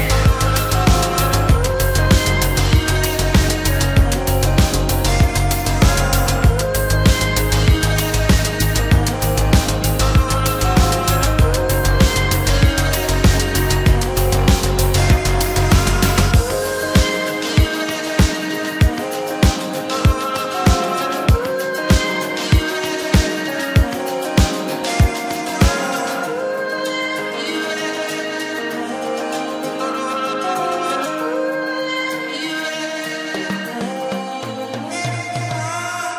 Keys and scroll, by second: 1.7 shift+space, 2.5 s, 12.4 shift+space, 14.3 s, 23.7 shift+space, 34.6 space, 35.4 f.